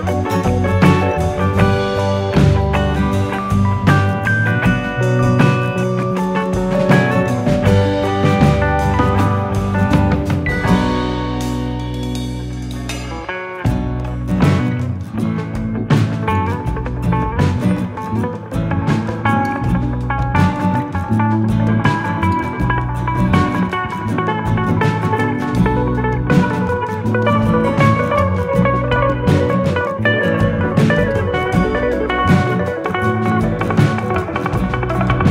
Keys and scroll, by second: 4.1 ctrl+v, 4.1 ctrl+z, 5.3 ctrl+z, 7.4 ctrl+c, 7.9 ctrl+c, 8.6 ctrl+c, 9.8 ctrl+v, 15.1 0, 15.2 Return, 22.5 KP_0, 27.0 ctrl+v.